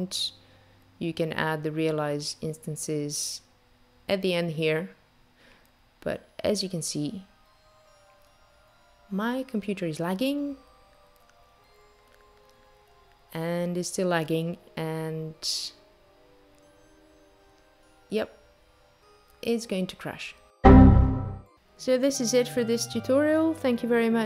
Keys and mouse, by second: 1.2 shift+a.